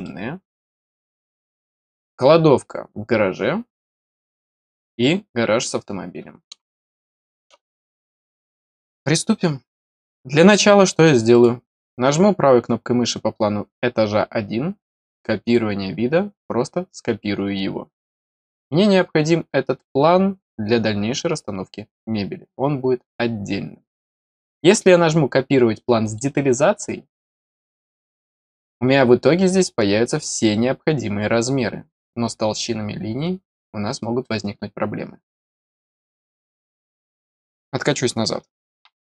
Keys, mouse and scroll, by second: 0.0 middle click, 6.6 middle click, 7.7 middle click, 11.3 right click, 23.5 scroll, 26.0 click, 28.1 middle click, 28.1-28.5 scroll up 2.